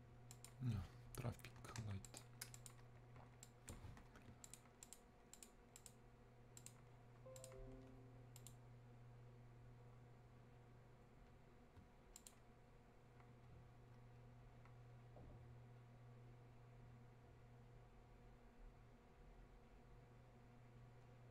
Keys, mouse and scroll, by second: 1.6 Escape, 2.1 click, 4.5 ctrl+click.